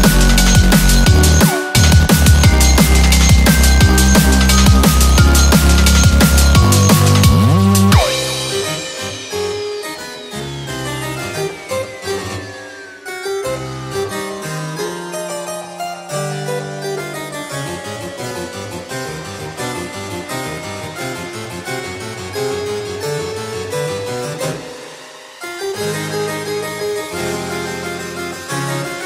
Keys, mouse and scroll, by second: 1.3 3, 6.6 3, 8.6-9.3 typing, 8.9 shift+middle click, 9.3 shift+scroll up 1, 27.2 5, 27.9-28.4 scroll down 12.